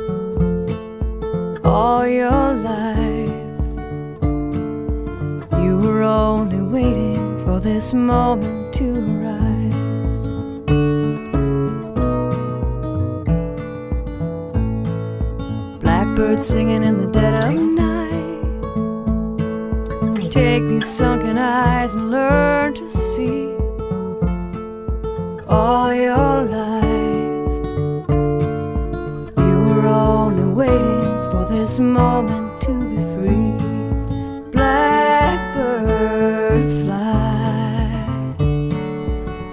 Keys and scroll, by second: 0.0 x, 3.5 space, 6.3 space, 6.6 x, 33.8 x.